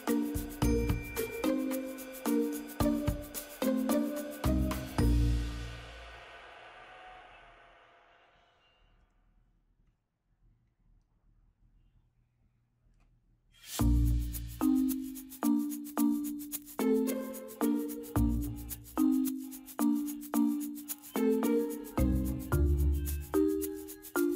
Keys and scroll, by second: 8.4 ctrl+u.